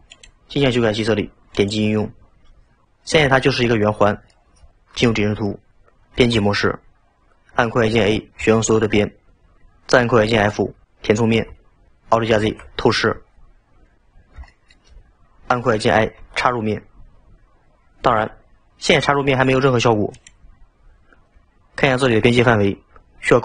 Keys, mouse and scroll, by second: 0.1 click, 1.6 click, 3.6-4.9 middle drag, 4.9 KP_7, 6.2 Tab, 8.4 a, 12.5 alt+z, 14.1-14.5 scroll up 2, 14.5-16.2 shift+middle drag.